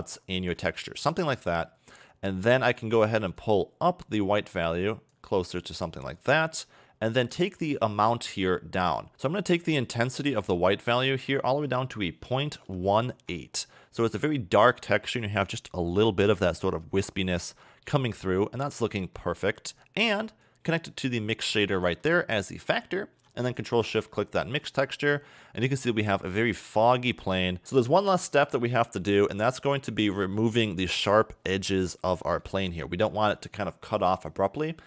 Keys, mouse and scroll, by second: 0.2 scroll down 1, 0.8 middle click, 1.4-3.4 scroll up 3, 3.4 click, 5.4-6.1 scroll up 8, 6.1 middle click, 6.5-7.3 scroll up 4, 7.3 click, 10.2 click, 14.6 a, 14.8 a, 16.0 scroll down 2, 17.0-17.6 scroll up 3, 18.8-19.1 scroll down 4, 19.1 middle click, 20.4 click, 21.8 middle click, 22.6-23.4 scroll down 2, 23.4 ctrl+shift+click, 24.1 scroll down 2, 24.2 middle click, 25.3-25.8 scroll down 4, 26.2 middle click, 27.6 middle click, 29.0 ctrl+shift+click, 30.0 scroll down 2, 30.3 middle click, 31.8-32.2 scroll up 1, 32.2 shift+middle click, 34.8 scroll down 3.